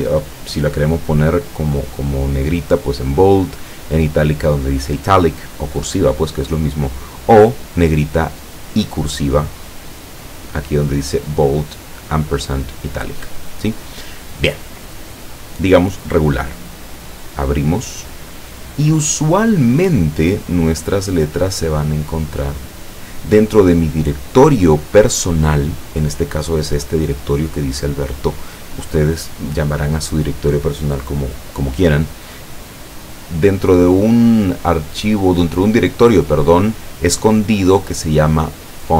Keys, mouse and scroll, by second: 17.4 click.